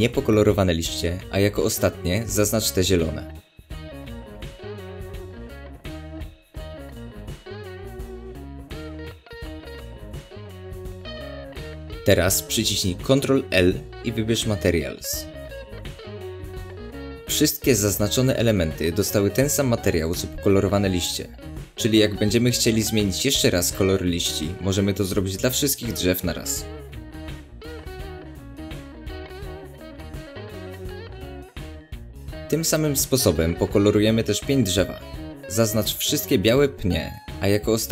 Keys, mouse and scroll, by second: 0.3-1.6 middle drag, 1.6 shift+click, 2.5 shift+click, 3.4 shift+click, 4.0 shift+click, 4.7 shift+click, 5.5 shift+click, 6.4 shift+click, 7.2 shift+click, 8.0 shift+click, 8.6 scroll down 2, 8.7-10.9 middle drag, 10.9 shift+click, 13.5 ctrl+l, 20.6 click, 21.7 click, 22.5 click, 24.8-27.7 middle drag, 27.7 click, 36.3 click, 36.9-37.9 middle drag.